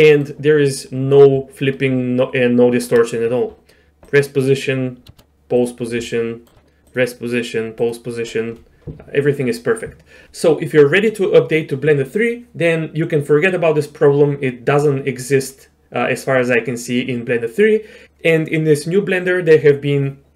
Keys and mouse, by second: 0.1 middle click, 1.7-2.8 shift+drag, 4.1 click, 5.6 click, 6.1 shift+middle click, 6.9-7.9 drag.